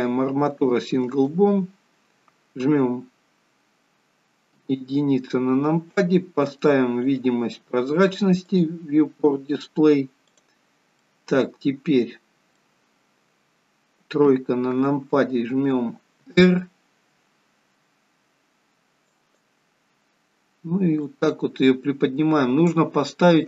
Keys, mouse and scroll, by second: 4.6 KP_1, 7.2 click, 8.5 click, 10.3 click, 11.0 middle click, 13.0-13.4 scroll up 5, 14.3 KP_3, 16.2 r, 21.1 click.